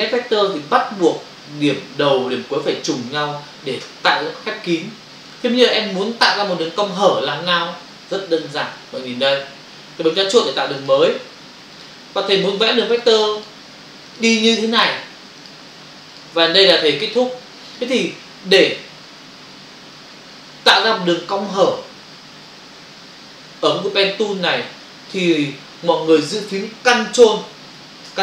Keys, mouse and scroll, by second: 10.8 click, 12.3 click, 12.5 click, 12.9 click, 13.0 double click, 13.4 click, 14.2 double click, 14.8 click, 14.9 click, 15.4 click, 15.5 double click, 16.1 click, 16.2 click.